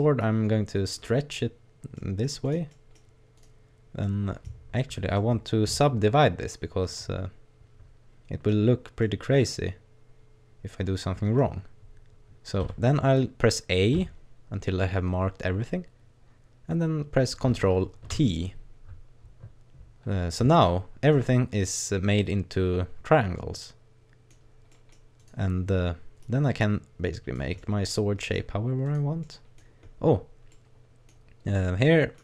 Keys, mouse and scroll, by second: 0.2 click, 2.0 middle click, 2.4 right click, 2.7 middle click, 3.4 right click, 4.1 middle click, 5.2 middle click, 9.0 middle click, 12.6 a, 14.0 a, 15.1-17.2 scroll up 2, 18.2 ctrl+t, 20.7 shift+middle click, 21.3 middle click, 24.7 middle click, 25.2 right click, 25.5-26.2 scroll down 1, 26.2 click, 27.6 middle click, 28.2 middle click, 28.9 right click, 29.2 middle click, 29.9-30.5 scroll up 3, 30.6 middle click, 31.2-31.9 scroll up 2, 31.9 middle click.